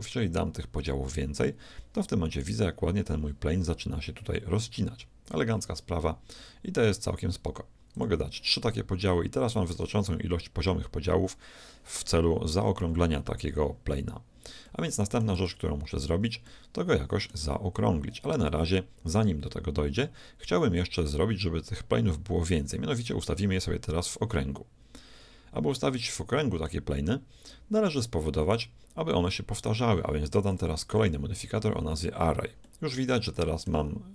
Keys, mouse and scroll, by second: 0.8-2.8 drag, 7.9-9.9 drag, 14.8 middle click, 15.4 Tab, 16.1 Tab, 16.5-18.3 middle drag, 25.8-29.3 middle drag, 30.5-32.7 drag, 32.7-34.1 middle drag.